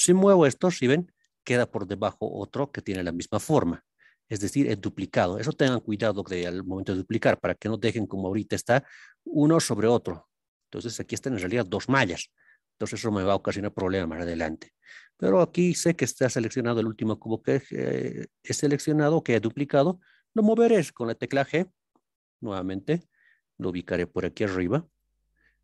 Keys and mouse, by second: 2.8-15.1 right drag, 15.4 ctrl+KP_3, 24.9-25.6 drag.